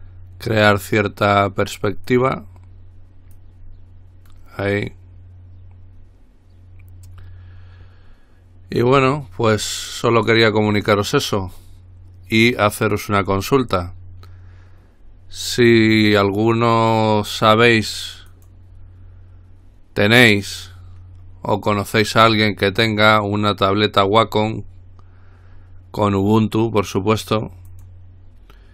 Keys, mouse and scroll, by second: 2.3 click, 3.5-5.0 drag, 13.4 click, 18.5 click, 23.9 click, 27.9 click.